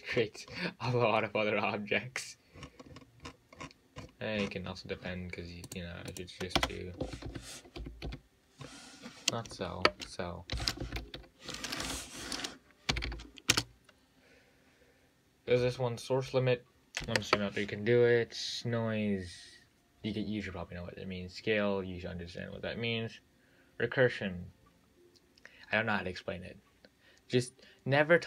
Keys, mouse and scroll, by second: 2.8-5.9 scroll up 49, 5.9 click, 6.4 click, 6.8 space, 8.3 l, 13.3 l.